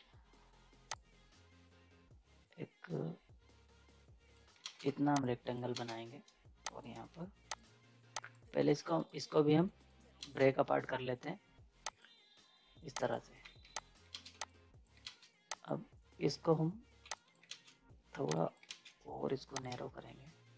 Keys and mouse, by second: 0.9-4.6 drag, 4.6 ctrl+space, 4.8 z, 5.2 click, 5.7 ctrl+space, 6.6 shift+click, 8.6 z, 8.7 right click, 10.2 ctrl+space, 11.8 click, 13.4 z, 13.8 click, 14.1 ctrl+space, 14.3 z, 14.4 click, 15.0 ctrl+space, 15.5 click, 17.0 z, 17.1 click, 17.5 ctrl+space, 18.2 z, 18.3 click, 18.7 ctrl+space, 19.6-20.5 drag.